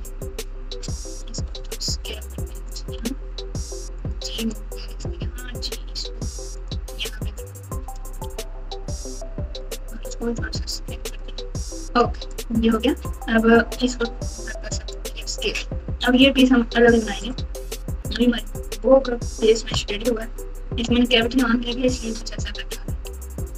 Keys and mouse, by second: 1.5 s, 3.0 g, 4.4 click, 5.5 g, 7.4 click, 8.2 g, 10.5 s, 12.3 click, 13.9 s, 16.8 Tab, 18.1 alt+z, 19.8-20.8 ctrl+KP_8.